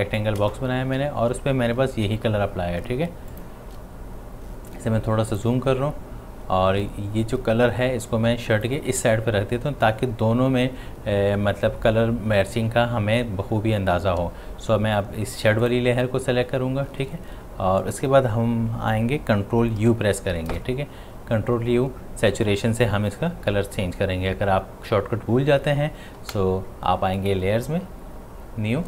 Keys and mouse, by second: 0.9 v, 3.1 space, 3.3-15.6 ctrl+drag, 19.4 click, 19.8 ctrl+u, 27.2 click.